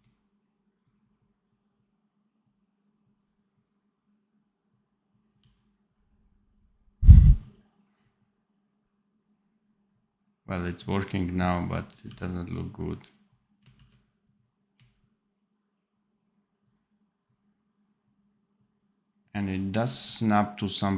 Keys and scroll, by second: 5.3 d, 12.0 d, 13.6 ctrl+z.